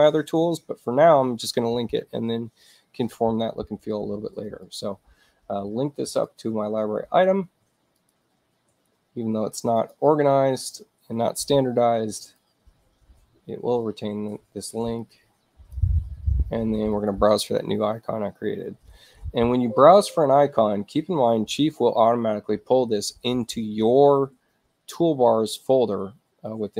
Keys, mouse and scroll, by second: 4.7 click, 6.3 click, 8.0 click, 8.7 scroll down 2, 9.8 click, 12.3 click, 15.0 click, 17.0 click.